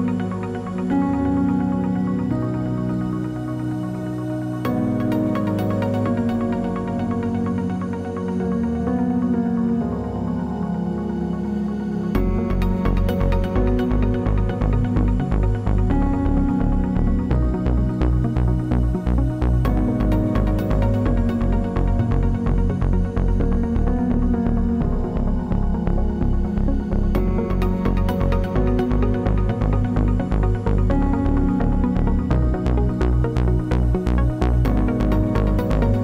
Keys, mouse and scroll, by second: 0.1 KP_0, 1.9 right click, 2.7-3.5 scroll up 5, 4.5 click, 4.8-5.1 scroll down 4, 5.1 click, 5.5 click, 6.6 click, 7.5 scroll up 3, 8.8-9.1 scroll down 2, 9.2 shift+a, 11.5 click, 12.3 middle click, 13.1 click, 13.8 click, 15.7 click, 17.6 middle click, 18.7 click, 19.4 click, 20.1 click, 20.7 middle click, 21.2 scroll down 3, 22.1 click, 23.8 click, 24.3 click, 25.5 click, 27.7 click, 28.9 click, 30.5 click, 31.9 middle click, 32.9-33.4 scroll up 8, 33.6 scroll down 3, 34.5 click, 35.3 click.